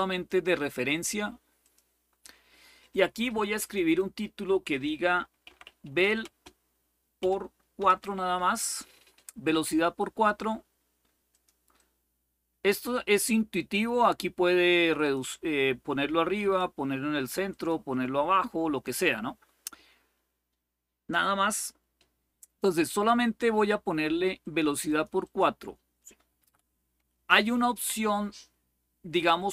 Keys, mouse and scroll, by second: 0.0 click, 1.4 click, 3.3 click, 5.0-7.5 typing, 11.1 click, 11.5-13.5 drag, 14.7 click, 16.2 click, 17.3 click, 18.8-20.9 drag, 24.2 click, 24.7 click, 25.0 click, 25.4 click, 26.2 Right, 26.9 space.